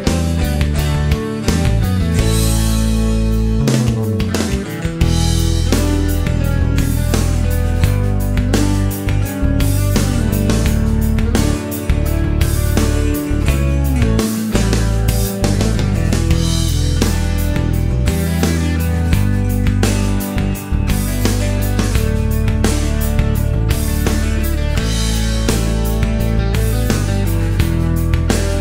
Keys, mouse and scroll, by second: 0.4-0.7 scroll up 2, 2.3 click, 4.0 click, 5.0 a, 6.3-7.2 typing, 10.0-11.2 drag, 13.0-14.4 drag, 15.6 click, 17.0 click, 17.6-19.3 typing, 20.2 scroll down 1, 20.4 middle click, 20.8 scroll up 1, 22.3-24.4 drag, 24.9 middle click, 26.2 scroll down 1, 26.3 middle click, 27.9 click.